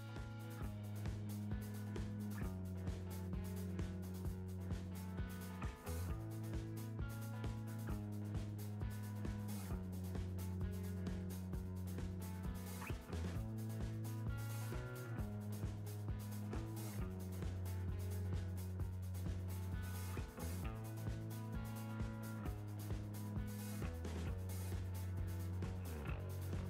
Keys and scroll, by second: 5.7 Return.